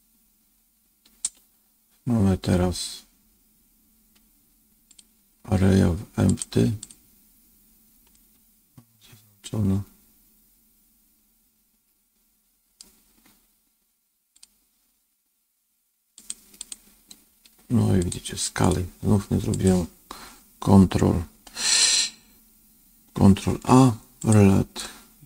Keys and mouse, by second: 5.0-6.3 drag, 8.0-12.7 middle drag, 14.3 click, 18.0 click, 18.6 click, 19.4 click, 23.4 ctrl+a.